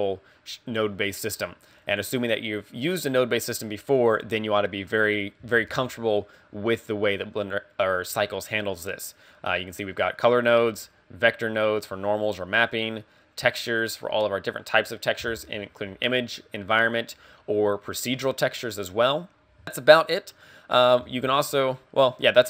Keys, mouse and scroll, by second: 0.4 scroll down 4, 1.4 middle click, 2.0-4.6 scroll up 2, 5.6 shift+a, 21.1 shift+a.